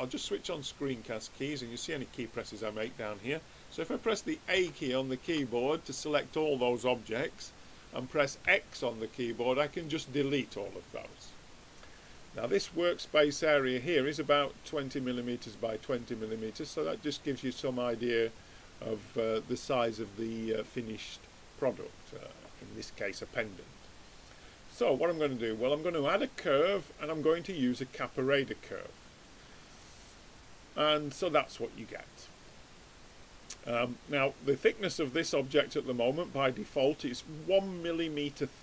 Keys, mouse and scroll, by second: 0.6-2.5 drag, 4.6 a, 5.2 a, 8.4 x, 10.5-16.6 middle drag, 16.6 click, 17.5-25.2 middle drag, 18.2 click, 25.2-27.1 drag, 26.9 middle click.